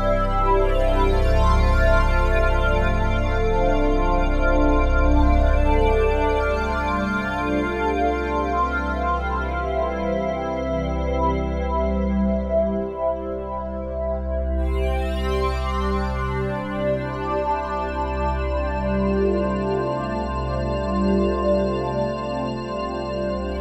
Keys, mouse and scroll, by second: 4.9 typing, 5.9-6.5 alt+drag, 7.1 typing, 8.7 typing, 14.1 Tab, 14.9-16.6 typing, 20.0 Tab.